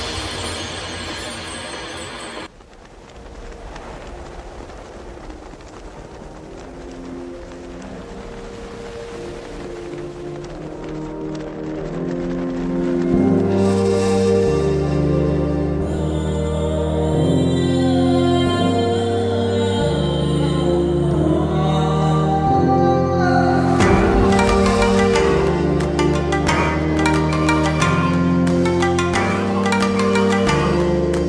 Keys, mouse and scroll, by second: 0.8 ctrl+o, 3.0 click, 6.8 ctrl+0, 7.6 v, 8.0 ctrl+t, 10.7-12.2 drag, 17.8-19.7 shift+drag.